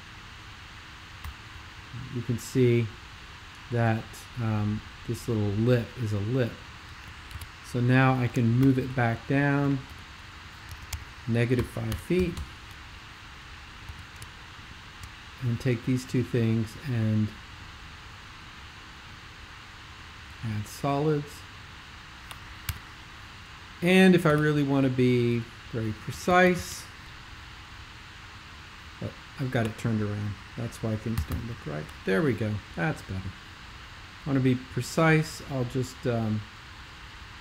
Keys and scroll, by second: 1.2 ;, 7.4 super+2, 8.6 alt+shift+super+m, 9.9 alt+super+m, 10.7 Tab, 10.9 Tab, 11.5-11.9 typing, 12.3 Return, 13.9 x, 22.7 super+5, 24.4 c, 26.3 super+2, 26.5 super+2, 31.3 super+l, 31.3 super+l.